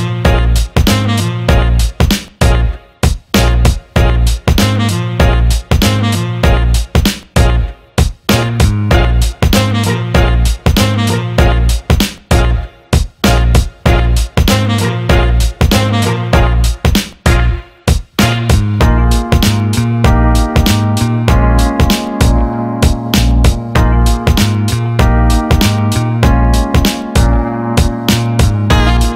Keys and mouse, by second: 0.4 click, 1.2 ctrl+x, 6.9 click, 8.1 shift+click, 8.9-11.2 right drag, 11.2 click, 12.2 g, 20.9 shift+click, 23.2 j, 25.0-27.4 right drag, 27.4-29.1 drag.